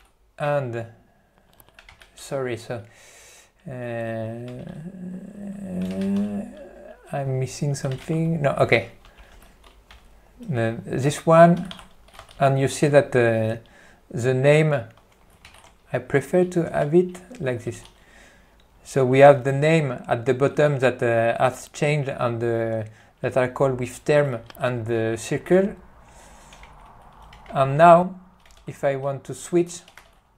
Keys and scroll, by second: 0.7 ctrl+o, 4.7 ctrl+o, 16.8 alt+t, 17.8 q, 26.9 ctrl+o, 27.6 ctrl+o, 28.7 ctrl+e.